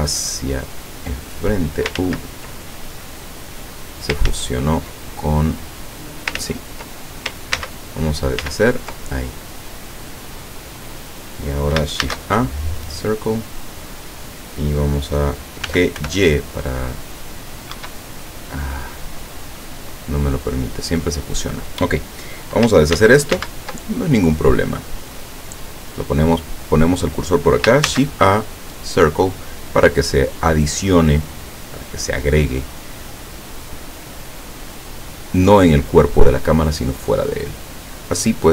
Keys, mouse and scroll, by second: 0.7-2.0 drag, 2.0 ctrl+z, 2.7-4.2 ctrl+middle drag, 4.3 ctrl+z, 5.6 click, 6.5 ctrl+z, 7.6 ctrl+z, 8.5 ctrl+z, 9.3 ctrl+middle click, 10.0 scroll down 1, 10.4-11.5 middle drag, 12.1 shift+a, 12.8 click, 15.7 g, 16.1 y, 17.8 Escape, 18.1-19.2 middle drag, 20.1-20.8 scroll up 2, 21.0 scroll down 2, 23.0 ctrl+z, 23.9 ctrl+middle click, 24.9 scroll down 1, 26.0 click, 27.9 shift+a, 28.8 click, 30.9 click, 32.5-32.9 scroll up 1, 33.1 scroll down 1, 34.0-35.3 drag, 35.6-36.9 drag, 37.2-38.5 drag.